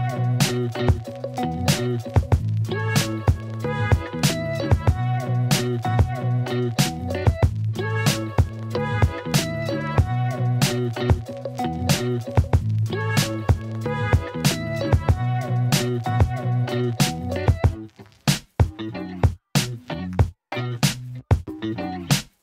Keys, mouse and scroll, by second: 0.6 s, 0.7 x, 1.9 z, 3.1 click, 3.5 s, 3.6 x, 4.5 middle click, 5.3-7.1 typing, 8.6 click, 9.5-11.1 typing, 10.0 click, 11.8 alt+shift+middle click, 12.1 alt+shift+click, 12.8 ctrl+r, 15.1 click, 15.8 g, 15.9 y, 19.2 click, 20.1 alt+middle click, 20.5 alt+middle click, 21.1 Tab, 22.3-22.4 drag.